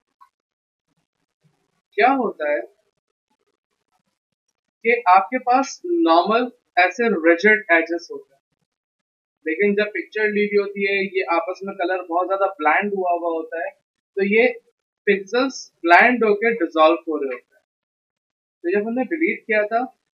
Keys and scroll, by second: 0.2 Return.